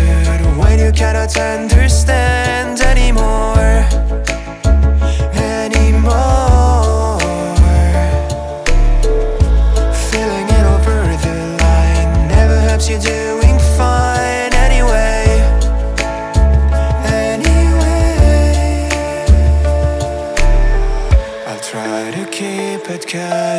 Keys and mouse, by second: 0.7 ctrl+middle click, 1.6 middle click, 2.8 ctrl+middle click, 3.3 Tab, 3.9 middle click, 4.5 middle click, 4.9 click, 5.5 l, 8.1 middle click, 9.2 click, 10.4 middle click, 11.2 click, 12.0 click, 21.2 click, 21.8 middle click.